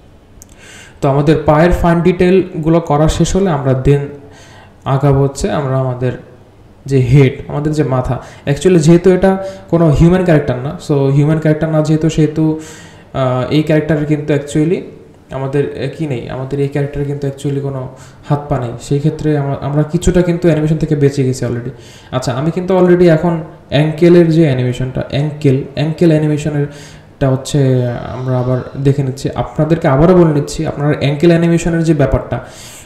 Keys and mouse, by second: 0.3 space, 1.3-2.2 drag, 3.7-6.7 drag, 8.1 g, 8.4 click, 8.7 g, 9.3-9.8 drag, 10.7 click, 11.3 g, 11.6-13.6 drag, 14.1 click, 14.6 r, 16.2-17.7 drag, 18.2 click, 18.6-19.9 drag, 20.7 click, 21.0 g, 22.7 click, 23.9 click, 24.7-25.6 drag, 26.5-27.9 drag, 28.1 r, 29.2-29.9 drag, 31.4-32.3 alt+drag, 32.5 space.